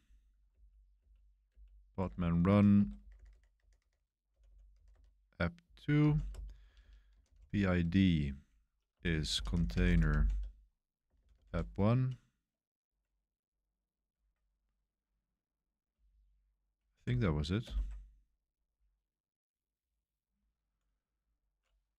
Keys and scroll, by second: 0.5 Up, 1.0 Up, 1.4 Up, 2.4 Escape, 2.5-11.9 typing, 16.0 Tab, 16.5 Tab, 16.6 Tab, 16.7 Tab, 17.6 Return.